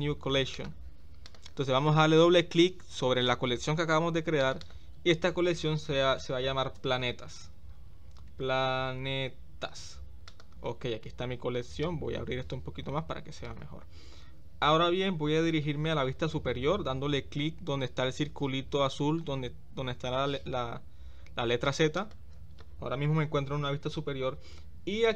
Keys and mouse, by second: 4.4 click, 4.6-10.4 drag, 11.8-13.4 drag.